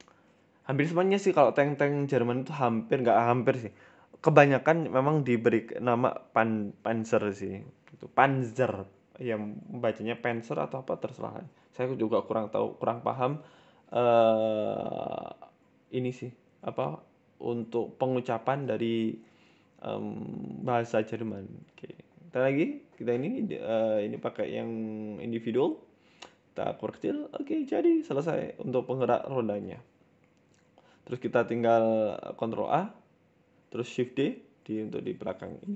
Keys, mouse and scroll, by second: 0.5 middle click, 1.0 scroll down 2, 1.2 middle click, 1.8 KP_1, 2.5 e, 4.0 s, 4.6 s, 5.6 click, 6.2 s, 7.9 scroll down 2, 8.0 Tab, 8.1 middle click, 8.6 scroll up 2, 8.8 middle click, 9.6 middle click, 10.1 scroll up 1, 10.4 ctrl+z, 10.5 ctrl+z, 11.0 middle click, 12.8 Tab, 13.5 click, 13.8 middle click, 14.0 Tab, 14.2 middle click, 14.5-15.1 scroll up 2, 14.7 middle click, 15.1 ctrl+z, 15.2 ctrl+z, 15.4 ctrl+z, 15.7 ctrl+z, 16.7 Tab, 17.2 click, 17.4 middle click, 17.6 Tab, 17.8 middle click, 18.2 click, 18.4 scroll down 1, 18.8 KP_1, 19.5 e, 20.4 s, 20.8 middle click, 22.3 click, 23.1 s, 24.5 Tab, 24.7 middle click, 25.0 scroll down 5, 25.2 middle click, 25.7-26.6 scroll up 3, 26.0 KP_1, 26.6 shift+middle click, 26.6 KP_1, 27.0 scroll up 1, 27.1-27.7 scroll down 4, 27.3 shift+middle click, 27.7 middle click, 28.3 KP_3, 28.8 KP_1, 28.9 Tab, 29.1 scroll down 3, 29.3 shift+middle click, 29.6 Tab, 30.3 shift+d, 31.4 ctrl+z, 31.6 Tab, 32.0 a, 32.3 shift+d, 34.4-35.0 scroll up 4, 34.7 shift+middle click, 35.0 s, 35.6 g.